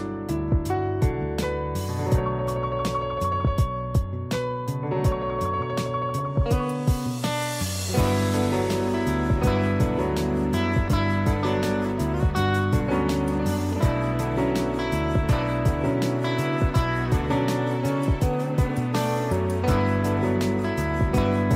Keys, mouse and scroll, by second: 4.1 click, 5.0 ctrl+z, 5.4 click, 6.4 ctrl+click, 7.5 ctrl+i, 8.7 click, 9.7 z, 10.0 click, 11.4 b, 12.1 click, 12.8-18.5 typing, 12.9 click, 13.7 click, 14.8 click, 15.2 click, 17.7 click, 19.2 click.